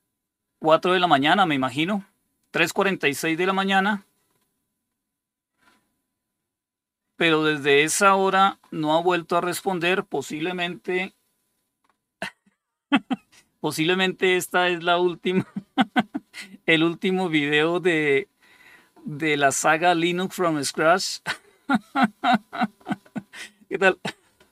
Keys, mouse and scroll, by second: 3.5-4.2 scroll up 2, 4.2-4.9 scroll up 1, 7.1 scroll down 3, 7.7-10.3 scroll up 3, 10.3-11.7 scroll up 1, 11.7-12.5 scroll up 1, 12.5-14.9 scroll up 1, 14.9-21.4 scroll up 1, 21.4-22.9 scroll up 1, 22.9-24.5 scroll up 1.